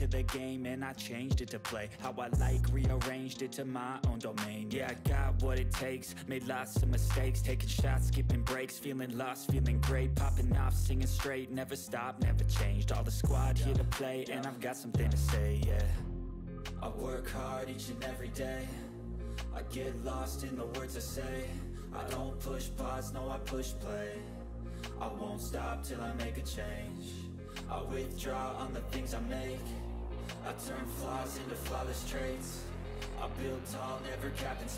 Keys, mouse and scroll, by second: 7.4 click, 9.3 ctrl+d, 9.5-10.7 drag, 13.7 right click, 14.2 click, 15.5 click, 16.4-16.8 drag, 19.6 click, 24.3 shift+click, 26.4 Up, 29.2 click, 30.1-30.9 click, 31.8 shift+click, 33.6 Down, 34.6 click.